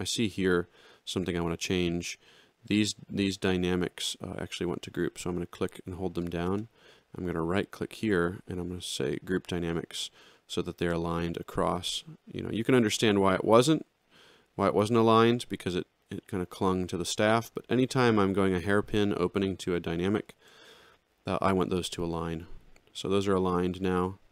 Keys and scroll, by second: 0.7 ctrl+=, 12.7 ctrl+z, 14.5 ctrl+z, 20.3 ctrl+y.